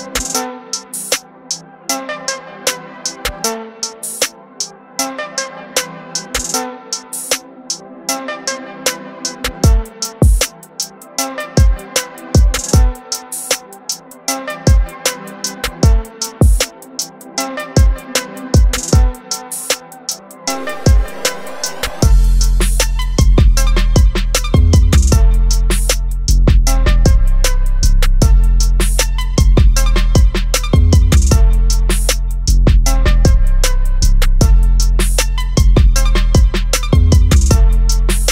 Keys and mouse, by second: 1.1 ctrl+alt+z, 3.4 ctrl+t, 4.0 click, 6.8 Return, 7.6 ctrl+t, 8.4 alt+click, 11.6 alt+shift+click, 13.6 click, 16.2 Return, 20.9 click, 23.2 click, 27.1 click, 32.6 click, 37.4 click.